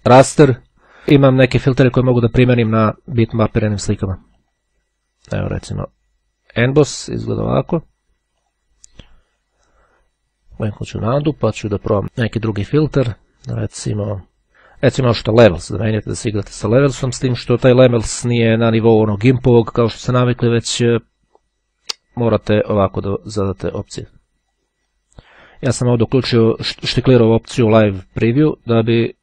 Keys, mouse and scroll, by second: 3.8-5.2 drag, 5.7 click, 8.5 click, 10.7 click, 15.5 click, 22.9 click, 23.8-25.2 drag.